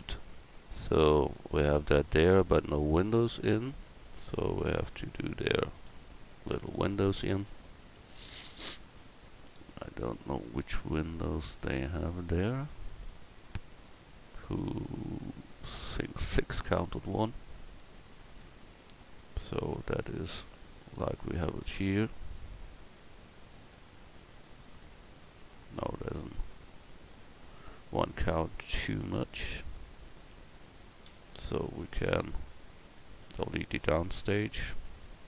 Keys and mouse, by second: 1.0 a, 5.9-7.3 middle drag, 7.3 KP_1, 9.4-10.3 middle drag, 12.8-15.4 middle drag, 20.8 middle drag, 23.5 middle click, 26.3 middle click, 26.8 KP_1, 29.0 click, 29.6 Tab, 30.0 click, 31.1 a, 34.1 b.